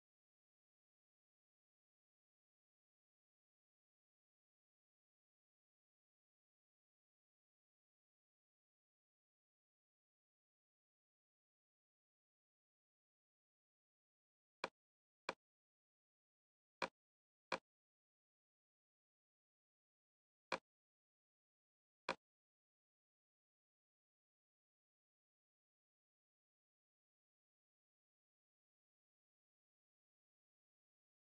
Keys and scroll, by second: 0.0-2.2 typing, 2.6 Tab, 3.8 Return, 4.3 Tab, 4.9-5.8 typing, 7.5 f, 7.8 g, 8.6 Return, 11.9 typing, 12.9 l.